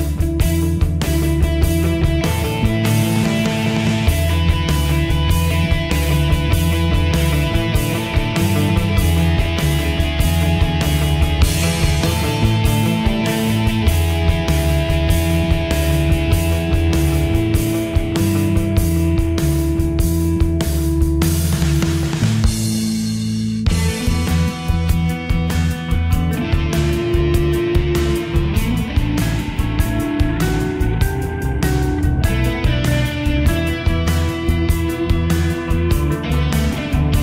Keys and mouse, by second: 9.0 middle click, 20.7 click, 25.1-31.2 typing, 32.2 Return, 32.2 KP_Enter.